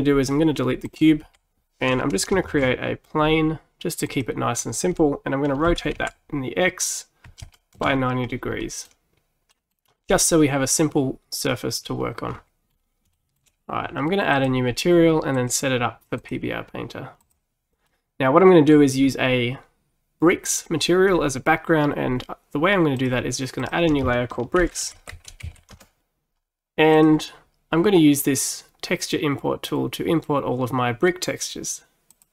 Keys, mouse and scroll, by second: 0.9 click, 1.3 Delete, 2.5 shift+a, 5.7 r, 8.7-12.3 middle drag, 12.3-12.7 scroll up 6, 12.7-13.2 scroll down 3, 13.2-14.4 shift+middle drag, 14.4-17.9 drag, 17.9-21.0 middle drag, 23.0-26.0 drag, 32.2 click.